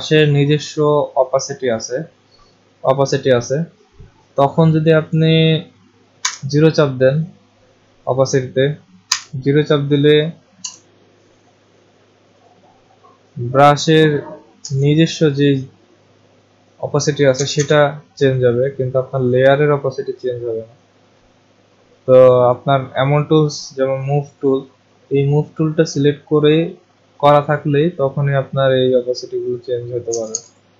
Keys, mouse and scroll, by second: 6.2 0, 8.1 click, 9.0 0, 10.6 Return, 12.5 click, 14.6 0, 17.3 0, 17.6 0, 24.3 click, 25.3-29.5 drag, 30.1 0, 30.3 0.